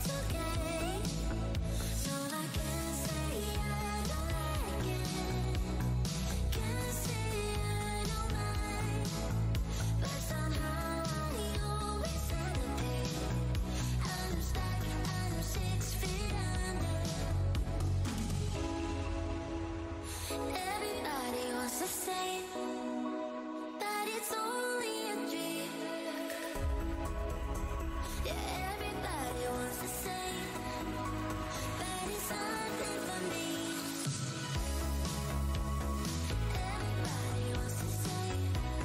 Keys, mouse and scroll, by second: 0.1 click, 1.5 click, 2.1 Tab, 2.7 click, 3.0 click, 3.1 Tab, 3.2 alt+click, 3.7 click, 6.4 Tab, 6.8 click, 6.9 Tab, 7.7 click, 9.3 Tab, 9.4 alt+click, 9.6-10.1 alt+scroll up 1, 10.9-11.4 alt+scroll down 1, 11.4 alt+w, 12.0 shift+Tab, 12.7 Tab, 13.2 alt+Tab, 13.3 alt+scroll down 1, 14.0 shift+d, 14.7 click, 16.8 shift+Tab, 17.4 alt+click, 17.7 shift+d, 18.2 click, 18.6 Tab, 19.3 click, 21.1 Tab, 21.7 click, 23.0 alt+click, 23.1 alt+Tab, 23.8 alt+`, 24.2 v, 24.8 Tab, 25.0 click, 26.2 ctrl+shift+Tab, 26.8 alt+click, 27.0 alt+Tab, 27.2-27.5 alt+scroll up 1, 28.1 alt+scroll up 1, 28.6 click, 29.9 Tab, 30.0 click, 30.1 click, 31.0-31.4 alt+scroll up 1, 32.1 shift+Tab, 32.2-32.5 scroll down 1, 33.5 alt+shift+w, 33.7 alt+scroll down 1, 33.9 alt+scroll up 1, 34.6 Tab, 35.2 alt+Tab, 35.2 alt+click, 36.3 Tab, 37.0-37.4 alt+scroll down 1, 37.5 ctrl+s, 38.0 Tab.